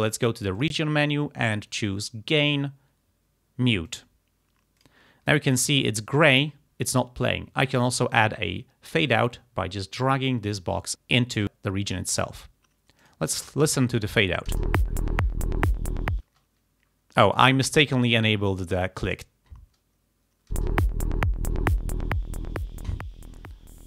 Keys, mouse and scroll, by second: 0.6 click, 3.9 click, 4.8 click, 5.7 click, 6.9 click, 9.2-10.9 drag, 11.4 click, 13.1 click, 13.7 click, 14.6 space, 16.3 space, 19.1 click, 20.6 space.